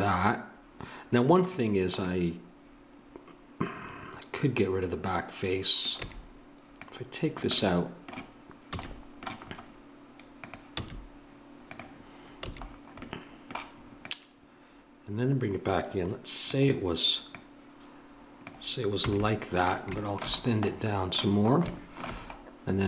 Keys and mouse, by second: 5.9 a, 6.8-8.7 drag, 8.7 a, 10.4 right click, 10.8 x, 12.4 a, 14.0-15.9 drag, 17.3-22.2 drag, 19.0 a, 22.2-22.8 middle drag.